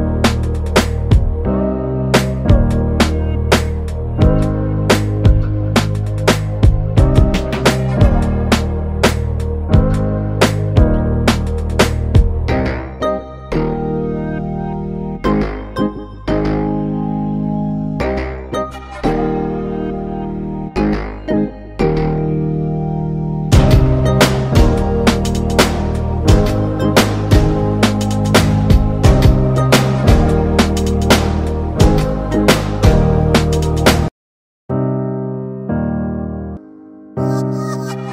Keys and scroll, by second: 4.6 ctrl+space.